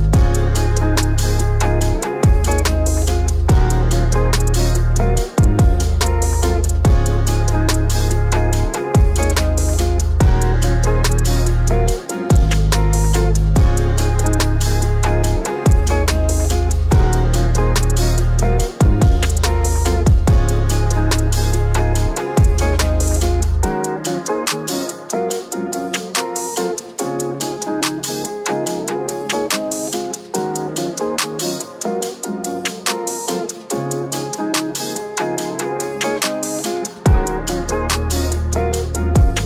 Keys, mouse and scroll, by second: 0.0-0.6 typing, 1.4 Return, 2.7 scroll down 1, 3.3 scroll up 1, 4.3 click, 23.5-23.9 scroll up 1, 23.9 middle click, 25.3 click, 29.7 scroll down 1, 30.3-32.3 middle drag, 32.3-39.4 drag.